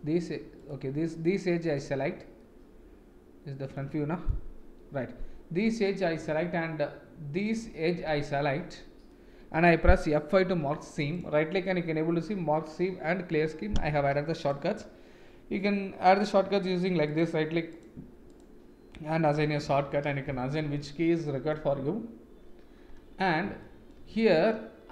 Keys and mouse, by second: 1.6 alt+click, 2.3-3.7 middle drag, 4.4 KP_1, 7.4 alt+shift+click, 8.3 middle click, 10.4 F5, 11.1-20.5 right drag, 20.8-21.5 middle drag, 23.6 shift+middle click, 24.1 middle click.